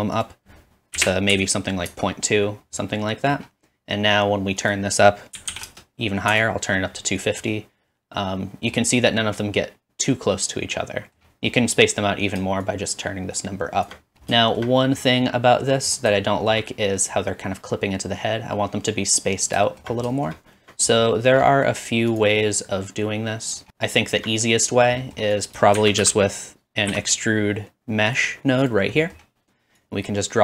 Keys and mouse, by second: 7.3-9.5 middle drag, 9.5 click, 10.1-13.9 middle drag, 14.6 shift+middle click, 14.8 middle click, 15.6 middle click, 16.4 shift+middle click, 17.7 click, 22.7 click, 25.0-30.4 drag, 25.8 shift+a, 28.6 typing, 29.8-30.4 middle drag, 29.8-30.4 right drag.